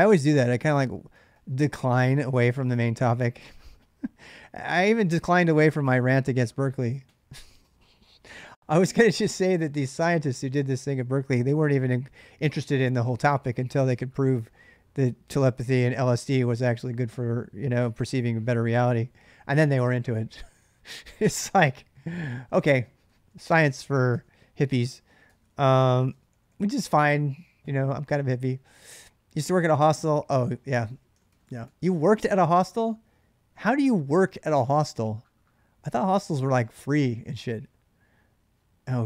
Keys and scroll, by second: 0.0-1.1 typing, 3.0-5.5 typing, 22.8-26.7 typing, 30.9 k, 31.1 k, 31.4 k, 35.7 k, 35.9 k.